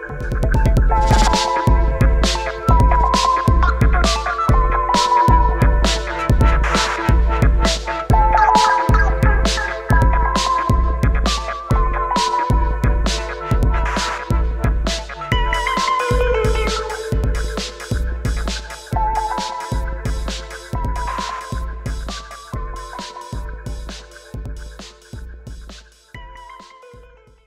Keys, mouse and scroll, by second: 0.0 click, 3.5 click, 4.2-5.0 shift+click, 8.1 scroll up 1, 8.8-9.7 scroll down 1, 9.7 click, 10.5 ctrl+click, 11.2 ctrl+t, 11.8-14.5 drag, 14.5-15.8 drag, 18.2 click.